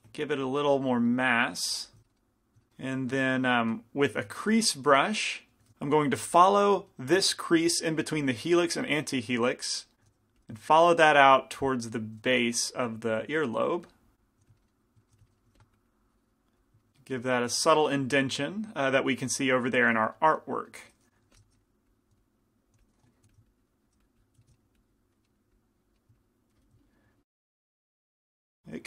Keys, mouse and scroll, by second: 1.4-2.8 drag, 1.4 right click, 2.1 right click, 2.8-4.9 middle drag, 4.3 shift+c, 4.5 f, 5.0 click, 5.7 f, 6.3 f, 8.2 f, 9.0-10.6 drag, 9.0-10.1 right drag, 10.1 shift+f, 11.1-13.0 drag, 12.4 f, 12.8 right click, 14.5 click, 14.5 f, 15.2 f, 15.5 f, 15.8-18.6 drag, 15.9 right click, 16.9-18.6 right drag, 18.6-21.2 middle drag, 21.2-23.3 typing, 21.9-24.6 drag, 26.7 click, 27.4-28.8 middle drag.